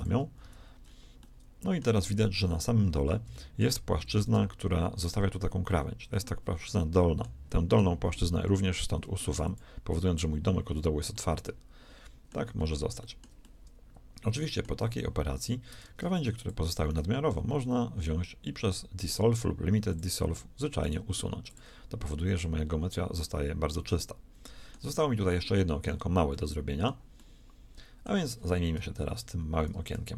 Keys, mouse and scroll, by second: 0.3 z, 8.4 x, 15.7 ctrl+Tab, 17.3 x, 20.5 click, 20.7-22.1 right drag, 20.9 x, 22.3-24.3 middle drag, 29.0 KP_3, 29.8 z.